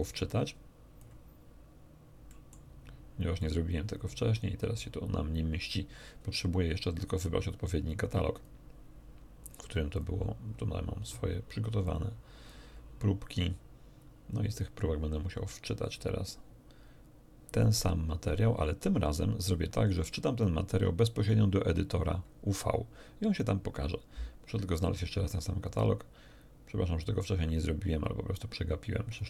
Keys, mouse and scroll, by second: 0.0-1.2 drag, 2.2 middle click, 3.4 click, 4.7 click, 8.3 click, 9.4 click, 9.9 click, 11.4 click, 11.8 click, 14.3-20.6 drag, 23.8-28.5 drag, 29.0 click.